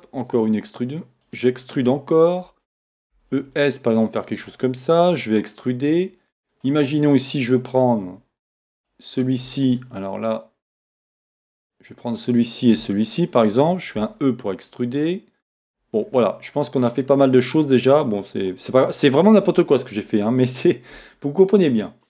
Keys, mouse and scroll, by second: 1.3 click, 1.7-4.4 shift+middle drag, 3.1 e, 4.4 click, 5.0 e, 6.0 click, 6.3-8.8 middle drag, 8.8 shift+right click, 11.5 shift+click, 12.6 shift+click, 13.1-15.6 middle drag, 14.0 e, 15.6 click, 16.0 scroll down 1, 16.4-21.6 middle drag, 17.9 scroll up 1, 19.4 Tab.